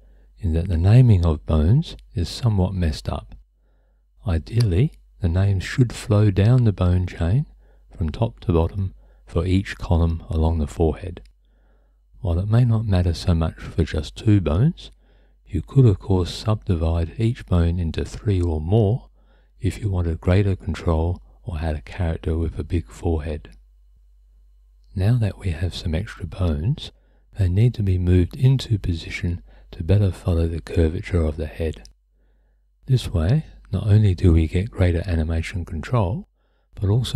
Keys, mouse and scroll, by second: 1.1 click, 2.4 F2, 7.5 click, 8.4 F2, 11.9 click, 12.7 F2, 13.6 BackSpace, 16.7 F2, 20.2 F2, 23.9 click, 26.6 click, 30.9 click, 35.0 click, 36.1 click, 36.7 click.